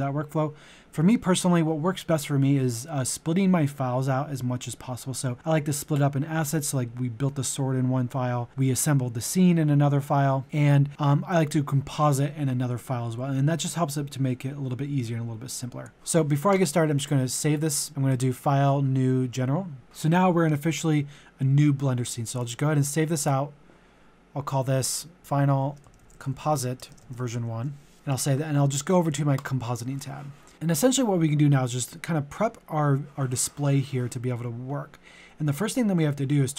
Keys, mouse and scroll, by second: 18.3 typing, 25.2-27.3 typing, 27.9 click.